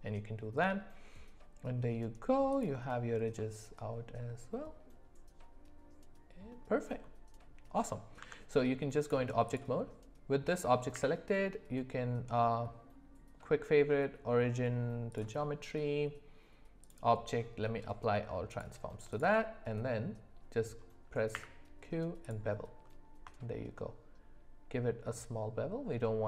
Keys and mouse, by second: 3.4-6.5 middle drag, 7.8 middle click, 8.2 Tab, 10.9 q, 16.8-18.6 drag, 21.3 q.